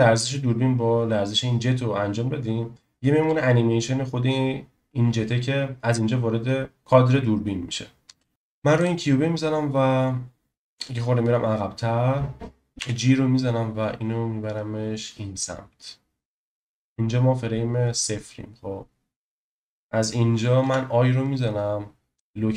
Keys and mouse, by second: 8.0 space, 12.8 g, 20.6 i.